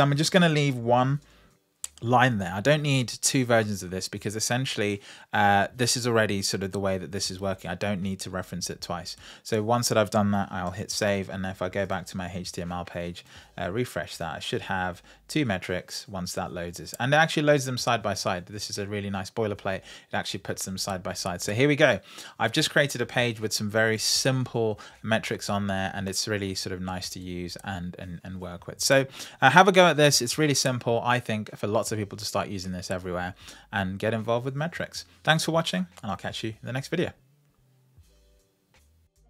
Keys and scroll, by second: 1.0 Tab, 10.5 super+s.